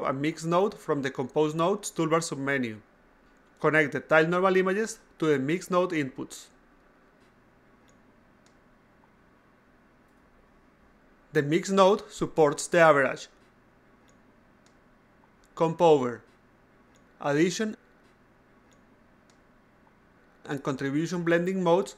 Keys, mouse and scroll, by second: 0.2 click, 1.1-3.0 drag, 3.3 click, 4.4 click, 5.3 click, 6.2 click, 7.2 click, 7.5 a, 7.8 click, 8.7 click, 9.0 a, 9.4-9.9 drag, 10.5 click, 11.0 click, 11.3 click, 12.5 click, 13.5 click, 15.3 click, 16.1 click, 17.5 click, 18.5 click, 20.3 click, 21.5 click.